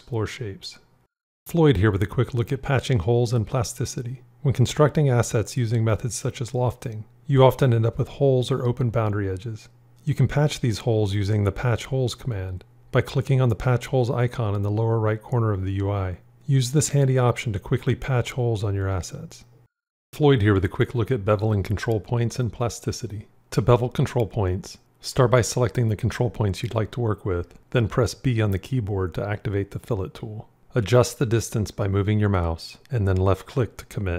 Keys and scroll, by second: 29.6 b.